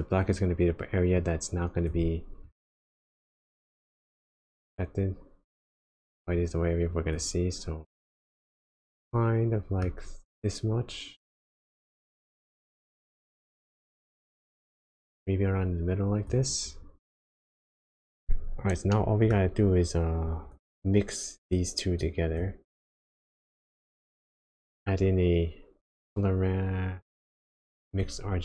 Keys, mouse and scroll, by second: 1.1 click, 2.4 click, 3.4 click, 8.1 click, 8.8 middle click, 11.3 click, 18.1 click, 18.4-18.9 scroll down 2, 18.9 middle click, 19.4-20.3 scroll up 2, 20.3 click, 20.7 click, 22.0 click, 22.7 click, 23.1 scroll down 1, 23.4 scroll up 1, 23.9 shift+a.